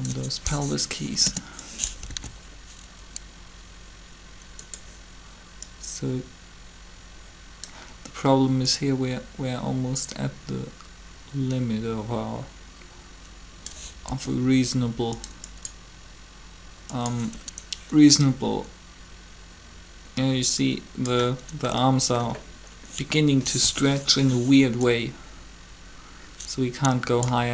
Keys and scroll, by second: 1.0 shift+Delete, 1.1 Return, 2.1 alt+a, 14.0 r, 23.6 3.